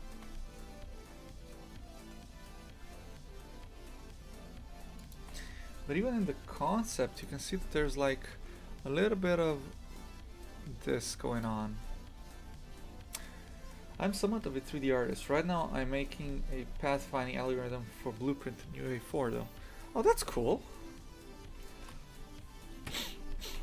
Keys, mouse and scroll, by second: 21.7-22.9 middle drag, 22.9 KP_3.